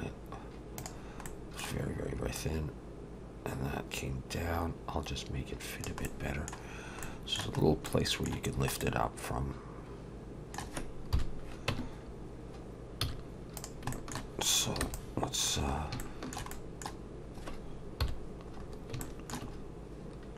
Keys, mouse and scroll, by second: 1.3 middle click, 2.4 click, 6.1 middle click, 7.0 middle click, 11.1 KP_7, 11.7 Tab, 13.0 z, 13.9 shift+middle click, 15.8 scroll up 3, 16.0 shift+middle click, 16.5 middle click, 18.0 KP_7, 18.6 scroll up 3, 19.0 middle click, 19.6 scroll up 1.